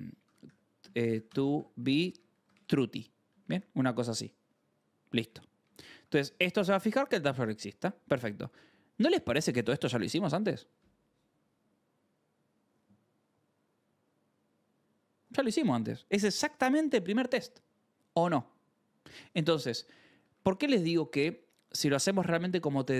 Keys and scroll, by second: 0.0-3.4 typing, 5.2 Right, 5.5-9.7 typing, 5.9 Escape, 6.3 ctrl+s, 20.3 Escape, 20.3 v, 20.9 k, 22.4 ctrl+c, 22.4-22.9 typing.